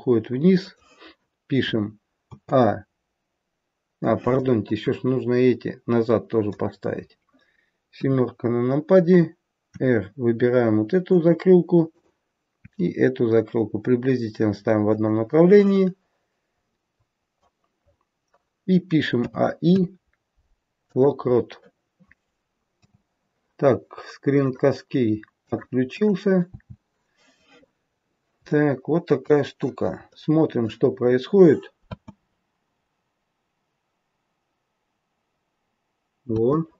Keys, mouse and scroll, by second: 27.7-28.4 scroll up 1, 28.4 shift+middle click, 28.4-30.0 scroll up 1, 30.0 middle click, 30.8-31.4 scroll down 3, 31.8 space, 36.3 space.